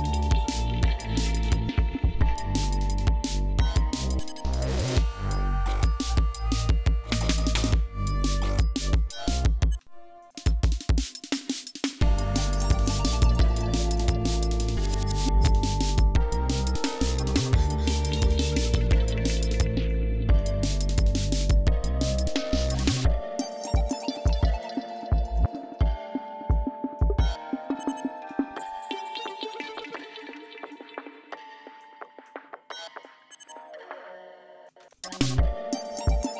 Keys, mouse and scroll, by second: 4.4 click, 6.2 click, 8.1-9.5 drag, 9.7 space, 10.1 click, 10.4 space, 10.6 ctrl+scroll up 2, 11.0 ctrl+click, 11.5 ctrl+click, 12.2-14.1 drag, 15.0 click, 16.9 click, 18.8 click, 19.7 click, 20.3-21.5 drag, 22.1 click, 23.6 click, 24.8 click, 26.4 click, 27.8 click, 29.9 click, 31.7 click, 32.9 click, 34.6 space, 34.7 click, 36.0 click.